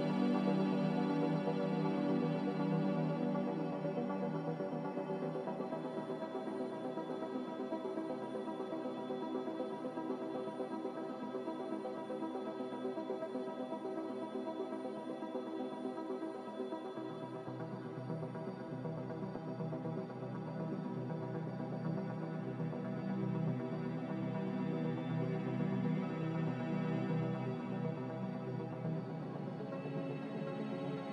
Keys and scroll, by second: 5.1 ctrl+z, 29.3 F9.